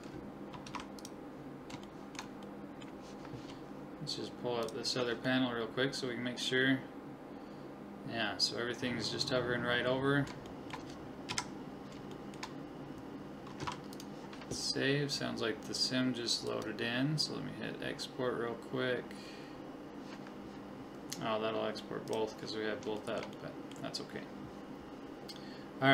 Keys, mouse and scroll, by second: 0.7 ctrl+s, 1.9 middle click, 4.6 click, 5.3-6.4 middle drag, 5.5 click, 5.9 click, 6.6 middle click, 10.1-12.3 middle drag, 11.3 KP_1, 13.6 ctrl+s, 23.0 click.